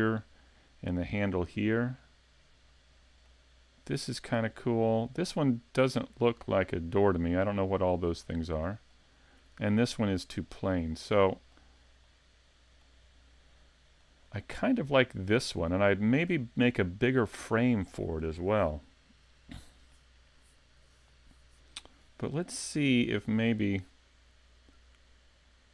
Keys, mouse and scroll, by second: 1.4 middle click, 4.3 middle click, 10.5 middle click, 11.3 middle click, 12.1 middle click, 13.1-13.6 scroll down 2, 13.6 middle click, 14.2-14.7 scroll up 2, 14.7 middle click, 15.3 scroll up 1, 15.6-16.0 scroll down 1, 16.0 middle click, 16.9 middle click, 25.1-25.5 scroll down 2, 25.5-25.7 scroll up 2.